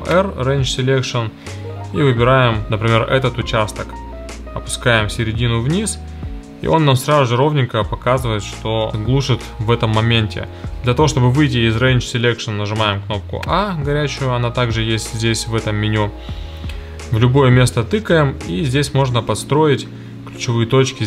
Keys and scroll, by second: 12.9 a.